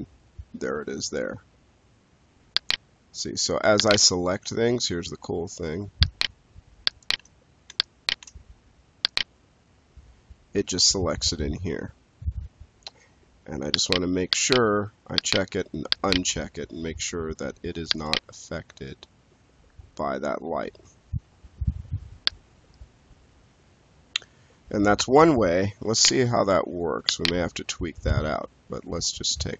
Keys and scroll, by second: 27.6 space, 29.4 space.